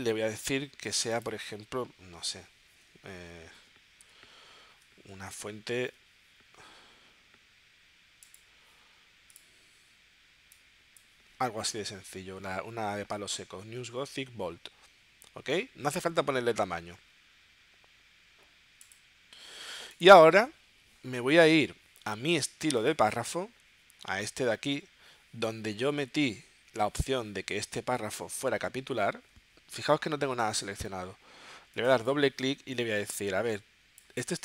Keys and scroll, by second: 4.0 n, 4.4 w, 5.1 Tab.